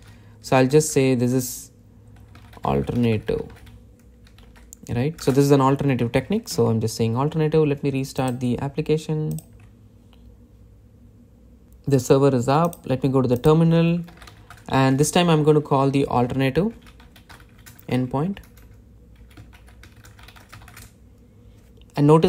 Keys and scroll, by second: 0.7 Return, 7.4 super+s.